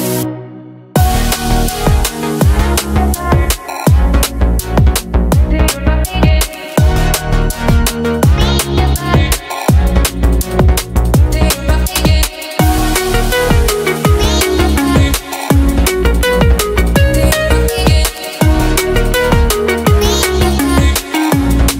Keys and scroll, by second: 2.2 ctrl+d, 5.3 space, 12.4 Left, 14.4 space, 19.5 space.